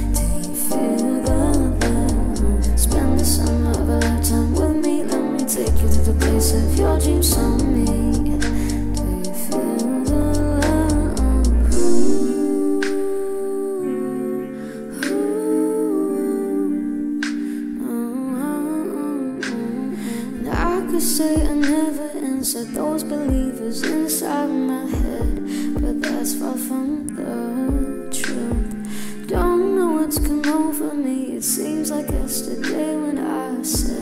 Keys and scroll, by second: 2.1 c, 2.1 Delete, 5.7-6.5 typing, 15.8 ctrl+k, 17.5 1, 18.1 Return, 23.9 ctrl+space, 24.8 d, 25.3 r.